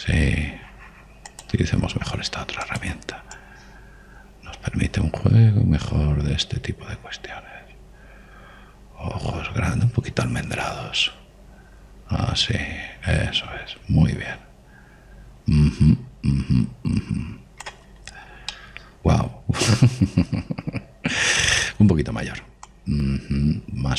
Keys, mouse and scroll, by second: 1.2 middle click, 2.3 click, 4.4 click, 18.9-21.4 middle drag, 22.4-23.8 middle drag, 23.8 click.